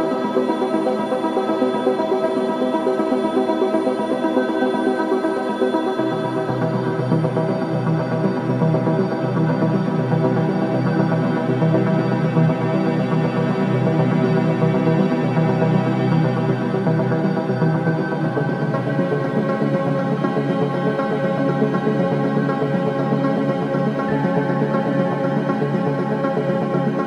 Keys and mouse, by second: 1.7-3.2 drag, 3.6-5.4 drag, 5.5 Tab, 5.9-12.3 drag, 12.3 middle click, 12.4 ctrl+alt+click, 12.5 middle click, 12.9-17.6 drag, 18.0 click, 19.2-20.5 drag, 21.9 Escape, 22.9 click, 24.1 click, 25.7 click, 26.2 Tab.